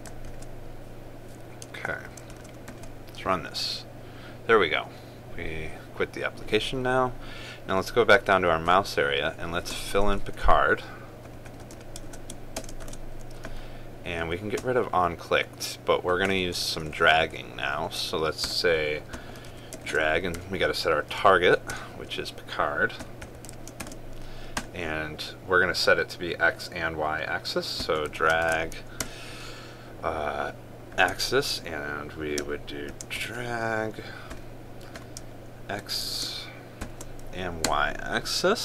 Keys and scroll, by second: 1.0 ctrl+v, 2.9 ctrl+s, 3.4 ctrl+r, 13.5 ctrl+space, 20.5 ctrl+space, 24.5 ctrl+space, 29.2 ctrl+space.